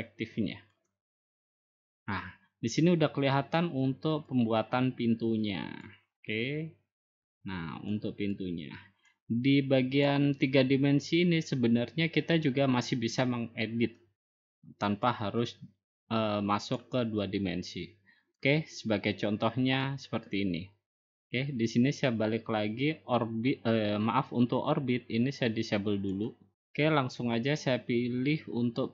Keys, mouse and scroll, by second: 2.3-3.4 drag, 5.2-6.4 drag, 6.8-8.0 drag, 9.3 click, 10.5 click, 11.5 click, 13.2 middle click, 13.9 middle click, 14.1 middle click, 15.4 click, 16.9 click, 18.1-19.4 drag, 19.7-26.2 drag, 26.6 click.